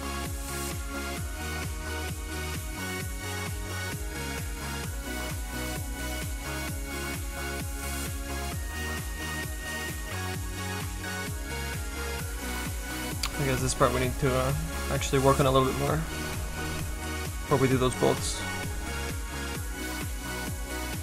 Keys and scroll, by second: 13.9 s.